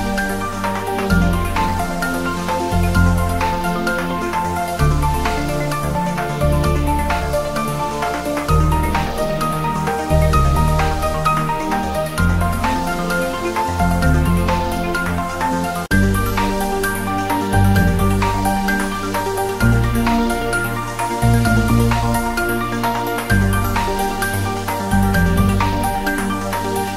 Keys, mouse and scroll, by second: 0.4 click, 1.2 scroll down 1, 1.6 click, 1.7-4.1 typing, 3.3 click, 5.0 click, 5.2-5.6 scroll up 1, 5.6 click, 6.0 scroll up 1, 6.0-6.8 typing, 7.9-8.3 scroll down 1, 8.9 Tab, 9.1-9.7 scroll down 1, 9.7-10.0 click, 10.5 ctrl+s, 11.2 click, 11.5 scroll down 1, 12.1 click, 12.4 scroll down 1, 13.3 click, 14.7 click, 15.7 click, 16.0-16.3 scroll down 1, 17.9 scroll down 1, 18.1-18.7 drag, 21.6-22.0 scroll up 1, 22.0 click, 22.3-22.8 scroll up 1, 23.7-24.3 scroll down 1.